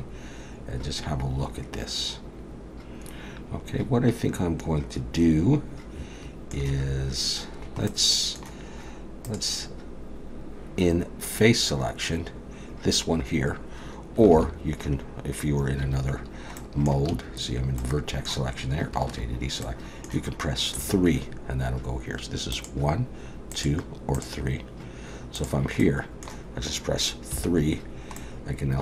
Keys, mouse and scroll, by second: 7.9 middle click, 9.3 click, 14.3 alt+a, 15.8 1, 16.6 middle click, 17.1 a, 17.8 middle click, 19.1 alt+a, 19.6 middle click, 20.8 3, 22.6 click, 23.5 click, 24.2 click, 25.4 click, 25.8 middle click, 27.3 3, 28.2 middle click.